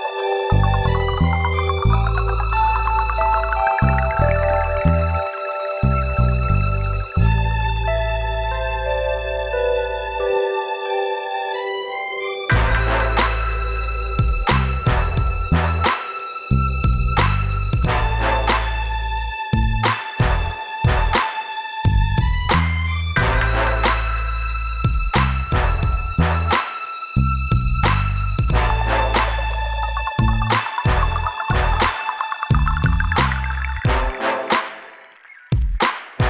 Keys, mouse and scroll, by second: 2.8 click, 3.1 click, 5.0 click, 6.8 click, 10.7 click, 13.6 click, 15.9 click, 17.0 scroll up 1, 19.3 click, 27.5 scroll down 2, 28.5 click, 28.6 click, 29.8 click, 34.2 click, 36.0 click.